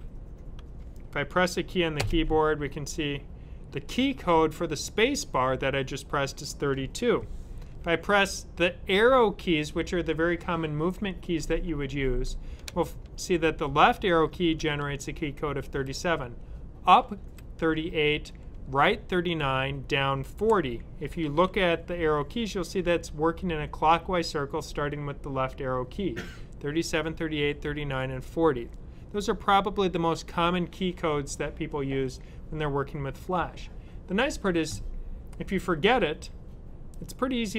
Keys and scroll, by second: 14.1 Left, 16.9 Up.